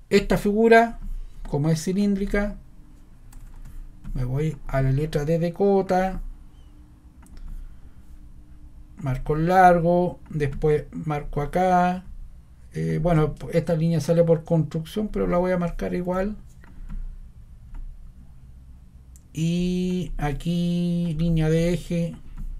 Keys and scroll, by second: 4.9 scroll.